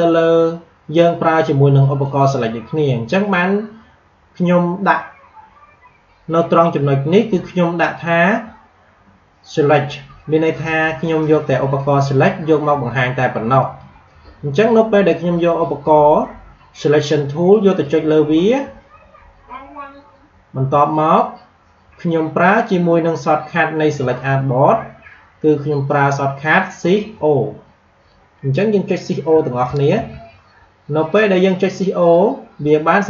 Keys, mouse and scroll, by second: 13.5 click, 17.5 click, 29.2 shift+Num_Lock, 29.5 shift+o.